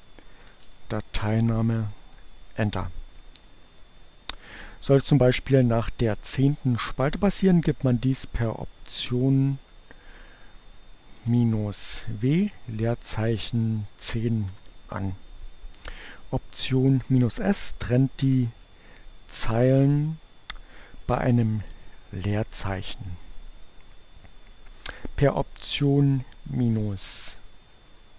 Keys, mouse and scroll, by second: 0.0-1.1 typing, 8.5 Up, 9.5 Left, 10.7 Left, 11.0 w, 12.1 space, 12.5 1, 13.0 0, 13.2 space, 14.2 Return, 18.3 Up, 18.5 Left, 18.9 Left, 19.7 s, 21.3 Return, 26.1 Up, 26.9 Left, 27.1 Up, 27.3 Left, 27.9 Delete.